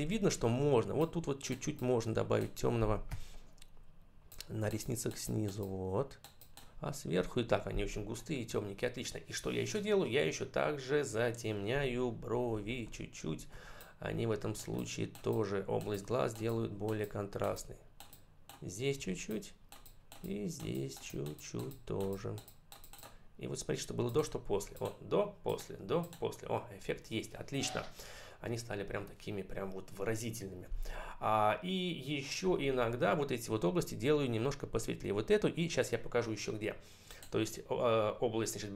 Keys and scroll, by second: 2.9 [, 12.2 ], 18.8 [.